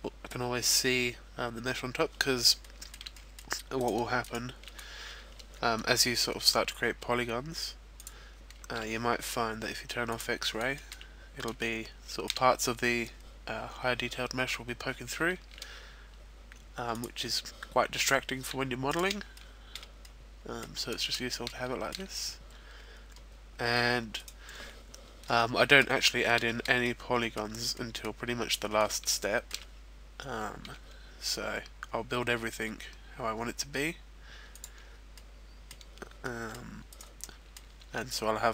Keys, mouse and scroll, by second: 2.1-3.1 scroll up 2, 2.6 shift+middle click, 3.1 middle click, 3.8 right click, 4.1 shift+right click, 6.6 e, 8.0 click, 8.3-9.1 scroll down 2, 10.0 click, 10.7 shift+middle click, 11.1-12.8 scroll up 3, 11.6 shift+middle click, 16.9 click, 17.5-18.1 scroll down 1, 18.1-18.4 scroll down 2, 18.4 x, 19.0 shift+middle click, 19.7 middle click, 21.1 shift+middle click, 21.1-22.2 scroll up 2, 22.9 right click, 24.2 middle click, 25.3 shift+middle click, 25.9 middle click, 26.8 middle click, 28.3 shift+middle click, 29.0-30.0 scroll up 1, 30.0 e, 34.1 click, 34.5-34.8 scroll down 2, 34.8 middle click, 35.6-35.9 scroll up 1, 35.9 middle click, 35.9-36.6 scroll down 1, 36.6 right click, 37.0 middle click, 37.7 e.